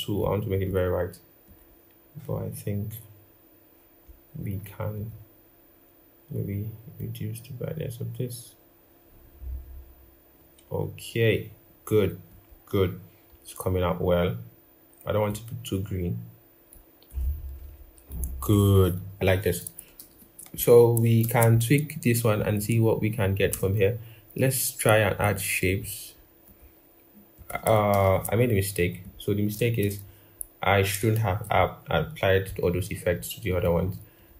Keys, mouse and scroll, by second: 19.8 ctrl+=, 21.0 ctrl+-, 23.3 typing, 27.7 ctrl+-, 27.8 ctrl+-, 29.9 ctrl+-, 29.9 scroll, 30.9 ctrl+=, 33.4 double click.